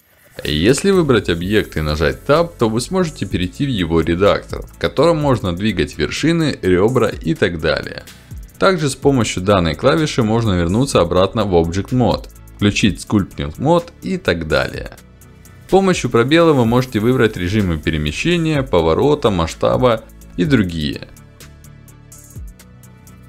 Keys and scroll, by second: 17.9 space, 21.2 space.